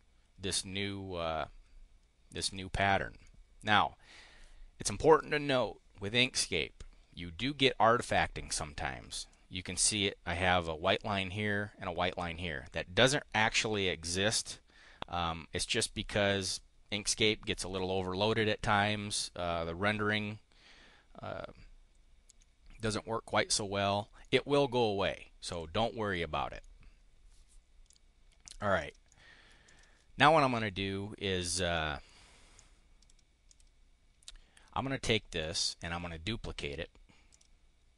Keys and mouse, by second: 2.4 click, 2.6 click, 3.1 click, 22.3 click, 23.3 click, 25.3 click, 26.0 click, 27.8 click, 28.6 click, 29.0 drag, 29.3 click, 31.7 click, 32.4 click, 33.4 click, 35.0 click, 35.8 click, 37.2 click.